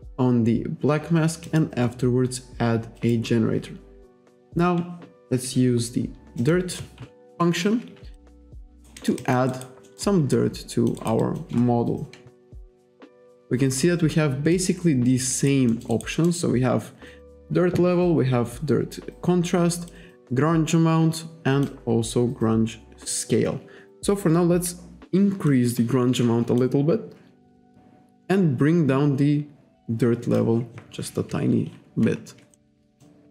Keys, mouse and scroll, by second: 1.5 click, 3.0 click, 4.5 click, 6.4 click, 8.2 alt+click, 8.8 alt+right click, 9.0 alt+middle click, 9.3 alt+click, 9.6 alt+right click, 9.9 alt+middle click, 10.4 alt+click, 11.1 alt+right click, 11.3 alt+click, 12.7 click, 15.4 alt+right click, 15.8 alt+middle click, 16.0 alt+right click, 20.0 click, 21.9-22.3 scroll down 1, 22.9-23.3 scroll up 1, 25.5 click, 26.9-27.4 scroll up 1, 28.4 click, 32.6 alt+middle click, 33.1 alt+click.